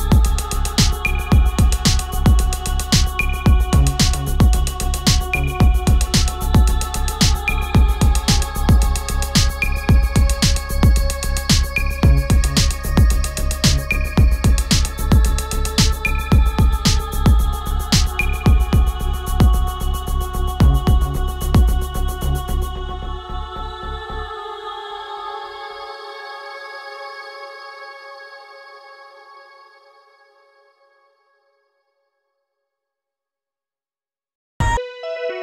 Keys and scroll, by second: 28.9 ctrl+z.